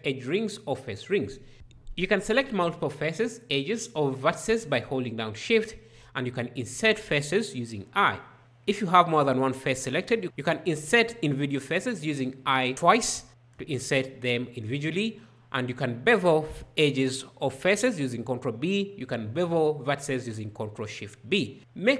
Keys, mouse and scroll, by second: 1.5 shift+right click, 6.1 i, 13.1 i, 16.2 ctrl+b, 19.7 ctrl+shift+b.